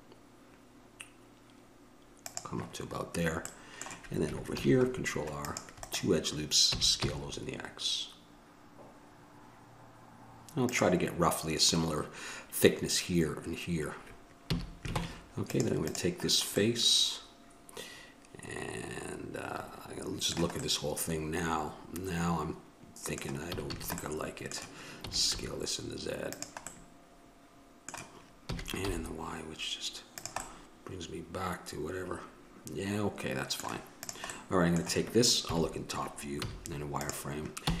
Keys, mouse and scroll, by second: 4.7 ctrl+r, 6.9 s, 14.7 a, 15.2 ctrl+Tab, 16.1-18.2 drag, 23.7 a, 23.9 a, 25.2 s, 28.7 s, 34.6-36.5 drag, 35.6 KP_7, 36.6 z.